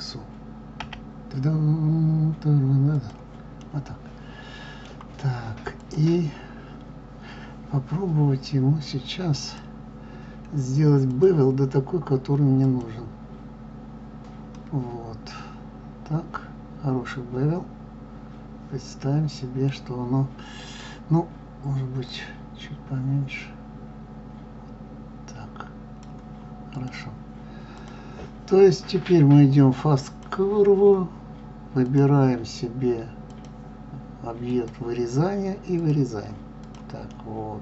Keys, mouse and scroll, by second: 3.6-5.7 middle drag, 5.7 click, 9.5-14.5 drag, 14.5-17.7 middle drag, 22.8-25.0 drag, 26.6 click, 27.7 click, 37.1-37.6 middle drag.